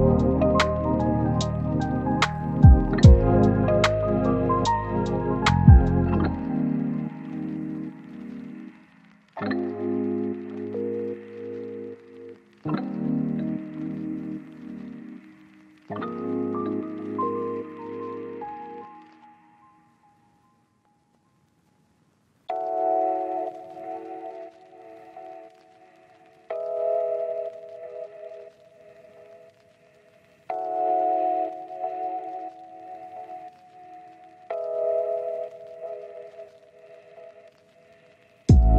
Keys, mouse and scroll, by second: 0.9 click, 1.5-1.9 scroll up 1, 1.9 click, 2.1 scroll down 1, 2.2-3.7 scroll up 1, 4.2 click, 5.5 scroll down 1, 5.6-6.3 scroll up 1, 6.3 click, 7.3 scroll down 1, 7.4 scroll up 1, 8.8-11.2 drag, 11.4 scroll down 1, 11.5 scroll up 1, 12.5 click, 19.1 scroll down 1, 19.2 scroll up 1, 19.4 right click, 20.1 scroll up 1, 20.9 click, 21.0 scroll up 1, 21.2 click, 21.6 scroll down 1, 21.6 scroll up 1, 21.9 click, 23.8 scroll up 1, 24.0 click, 24.2 scroll down 1, 24.4-24.7 scroll up 1, 24.7 click, 25.2 scroll down 1, 25.4 scroll up 1, 25.6-28.1 drag, 28.3 scroll down 1, 28.4 scroll up 1, 28.7 right click, 29.0 scroll down 1, 29.1-30.0 scroll up 1, 30.0-34.7 drag, 34.9 scroll down 1, 35.0-35.4 scroll up 1, 36.1 right click, 36.3-36.6 scroll up 1, 36.6 click, 37.9-38.6 scroll up 2, 38.2 click, 38.6 click.